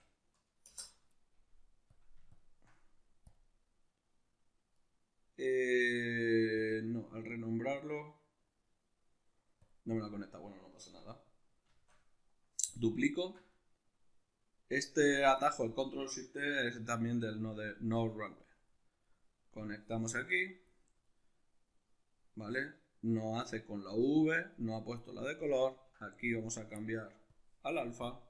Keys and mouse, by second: 4.3-6.1 middle drag, 6.1 click, 9.2 drag, 11.3 shift+d, 12.3 click, 12.7-19.2 ctrl+middle drag, 19.2 drag, 20.7-25.9 middle drag, 25.9-28.2 drag.